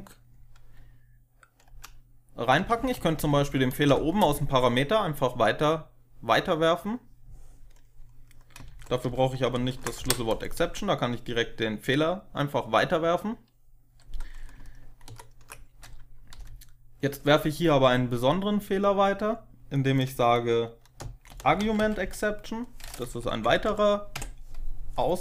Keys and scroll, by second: 1.6-3.7 typing, 8.5 ctrl+Left, 8.9 ctrl+Left, 9.5 ctrl+shift+Left, 9.9 Delete, 16.2 ctrl+shift+Right, 16.2 Delete, 21.0-22.4 typing, 23.1 Down, 23.4 Down, 23.6 Down, 24.0 Tab.